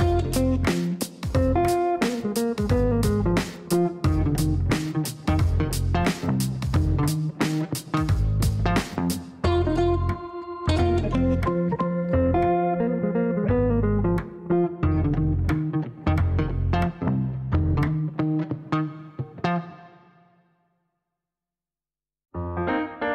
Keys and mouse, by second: 2.3 click, 4.1 click, 4.8 click, 5.8 click, 6.5 click, 7.2 right click, 11.0 click, 11.9 click, 12.6 click, 13.1 click, 18.8-19.7 typing, 19.8 Down.